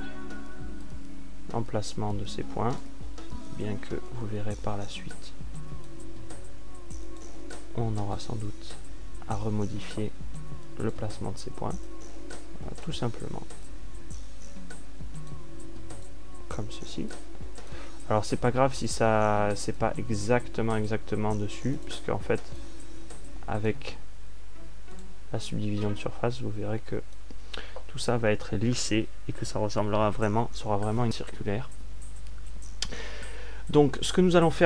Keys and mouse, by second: 2.0-3.7 drag, 5.0-8.3 drag, 8.3-9.3 right drag, 10.1-12.0 drag, 15.1-18.4 drag, 19.1 click, 27.1 right click, 29.5 a.